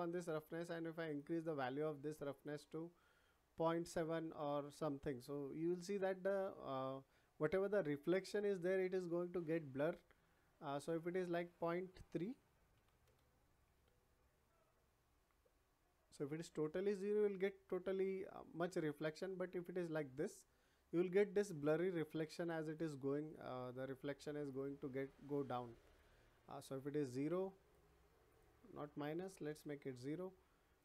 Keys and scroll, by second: 12.2 ., 12.7 3, 13.0 Return, 29.1 0, 29.4 Return.